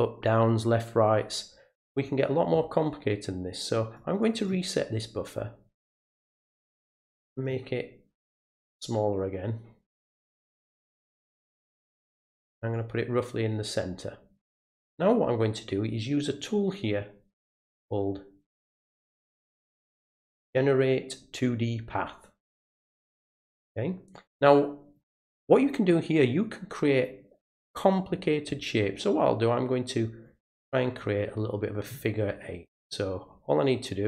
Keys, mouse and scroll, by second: 4.0 click, 4.2 click, 4.4 click, 6.8 click, 8.9-12.3 drag, 12.7-14.4 drag, 16.4 click, 22.6 click, 24.1 click, 30.2-31.8 drag, 32.9-34.0 drag.